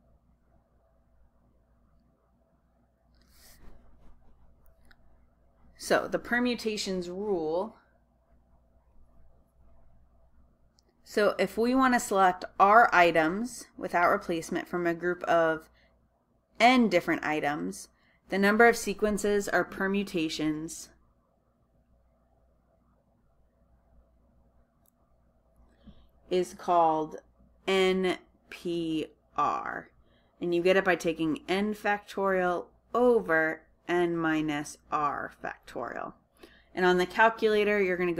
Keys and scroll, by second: 9.0 Return.